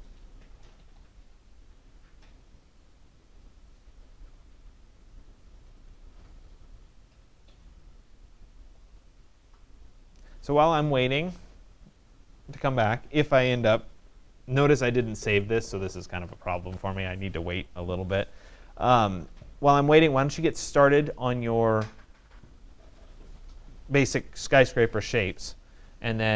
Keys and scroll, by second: 3.7 alt+-, 3.9 alt+4, 4.3 alt+Return, 13.5 alt+Return, 22.0 alt+1, 22.6 alt+Return.